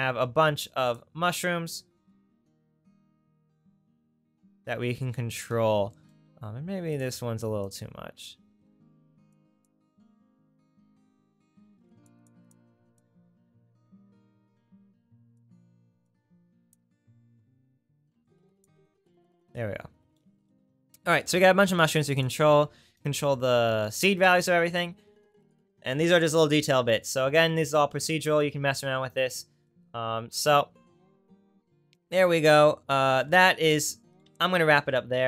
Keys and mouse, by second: 4.9 r, 7.0 click, 9.4-16.1 drag, 18.1-25.5 drag, 26.2 click.